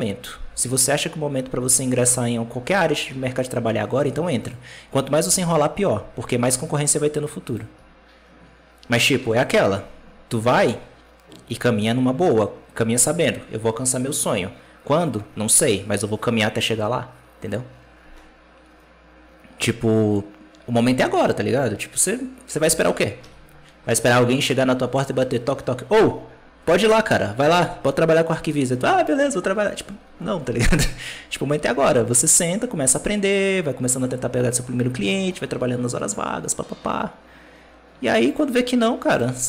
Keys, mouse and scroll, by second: 0.3 g, 3.0 alt+a, 4.3 right click, 5.1 g, 9.1 alt+a, 10.2 right click, 21.4 alt+a, 22.5 b, 38.1 click.